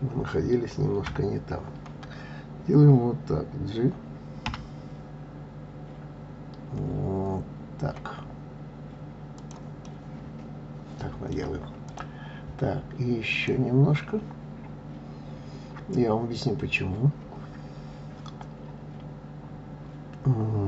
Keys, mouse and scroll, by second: 1.0 KP_3, 9.8-11.9 middle drag, 11.9 click, 13.3 click.